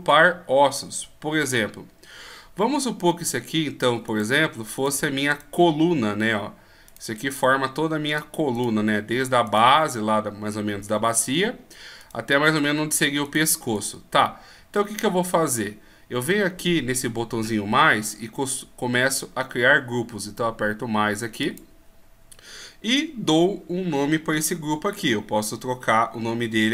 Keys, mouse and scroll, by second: 4.1 right click, 21.4 click.